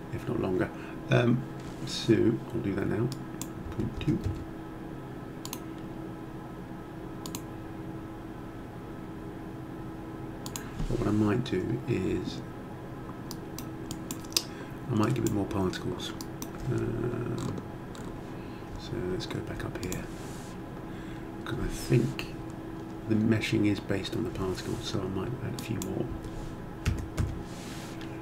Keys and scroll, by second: 3.6 ., 4.0 2, 4.2 Return, 26.1 1, 26.8 6, 27.2 Return.